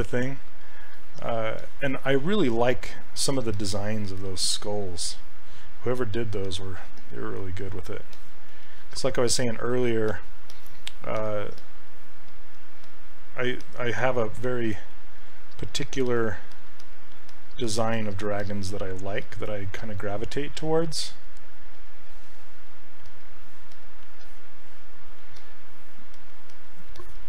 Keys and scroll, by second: 4.3 s, 22.3 s.